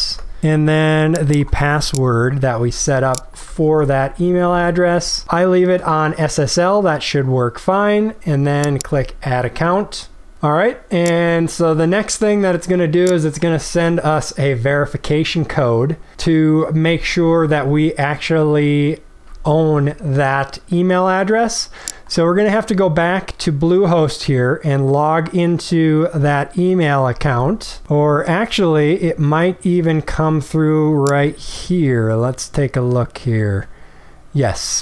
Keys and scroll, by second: 0.1 ctrl+v, 3.6 ctrl+v.